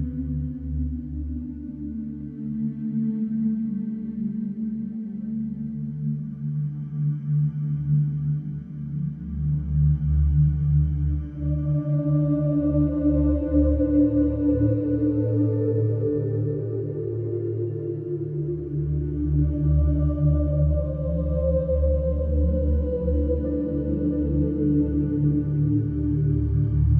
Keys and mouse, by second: 0.3 Tab, 0.5 alt+z, 6.5-14.1 drag, 13.3 0, 13.6 ., 13.8 0, 14.1 Return, 15.2 Right, 15.2 click, 15.3 Left, 15.7 3, 15.8 Return, 16.5-19.7 middle drag, 19.7-21.3 drag, 22.3-24.6 shift+middle drag, 24.6 shift+a.